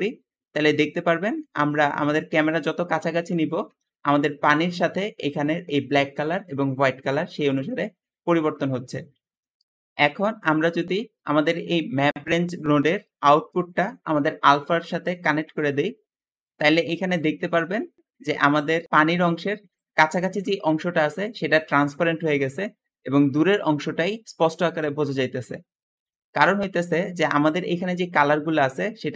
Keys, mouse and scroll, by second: 5.1 `, 7.3 Escape, 7.4 Escape, 13.3-14.9 drag, 19.3 `, 25.9 Escape, 26.4 Escape, 28.1 `.